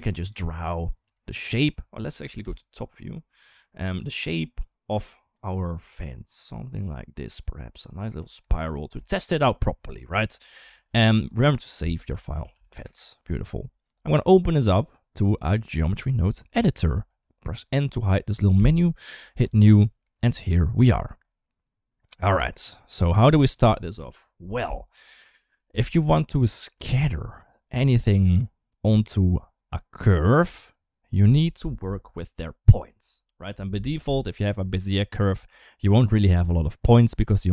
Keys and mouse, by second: 0.0 click, 2.2 KP_7, 4.4-7.6 drag, 8.0 Tab, 8.2-8.6 middle drag, 8.8 shift+middle drag, 10.6 ctrl+s, 14.0 click, 15.0-15.9 drag, 18.4 n, 19.2 click, 20.0 middle click, 20.8 middle click, 21.9 click, 24.3 middle click, 25.2 shift+middle click, 26.3 shift+middle click, 34.2 Tab.